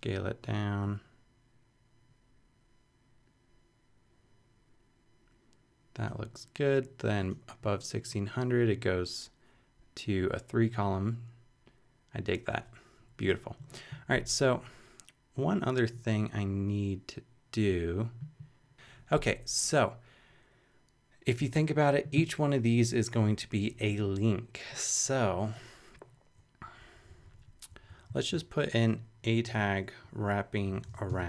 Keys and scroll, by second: 26.6 Up, 28.1 super+Up, 28.2 super+Left, 29.5 Return, 30.0 Up, 30.5-31.2 typing.